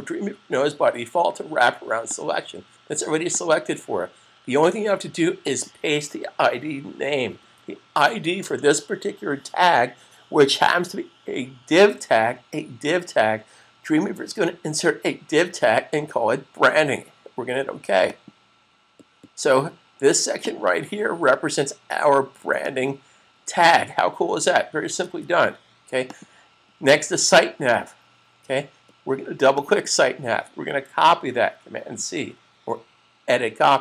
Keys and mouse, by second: 2.0 click, 7.4 super+v, 18.0 click, 25.0 super+s, 26.0 click, 29.4 click, 29.6 double click, 31.8 super+c.